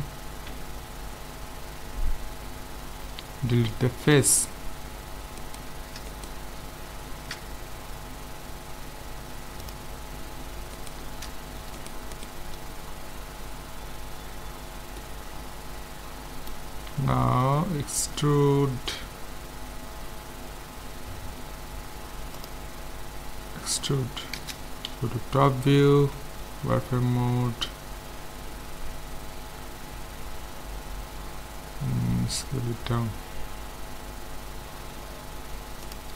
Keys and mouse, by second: 0.3 x, 5.4-7.9 right drag, 9.6-11.4 drag, 10.8-13.8 right drag, 15.0-17.7 middle drag, 22.4-24.1 drag, 23.6 e, 24.9 KP_7, 26.0 z, 32.4 s.